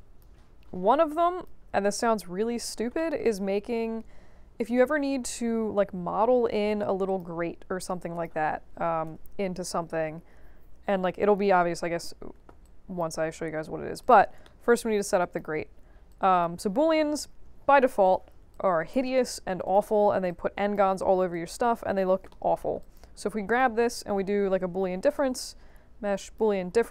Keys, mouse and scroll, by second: 0.7 middle click, 0.7 scroll down 1, 1.2 click, 2.0 alt+click, 2.9 alt+middle click, 5.2 q, 7.0 click, 7.8 click, 8.7 0, 9.0 Return, 12.6 alt+click, 13.4-14.0 scroll up 2, 14.0 click, 14.4 alt+middle click, 15.2 drag, 16.1-16.4 alt+drag, 18.0 click, 18.5 shift+click, 19.6 click, 20.2 shift+click, 21.3 alt+click, 22.3 alt+middle click, 22.8 alt+click, 23.5 click, 23.9 shift+click, 25.1-26.3 drag.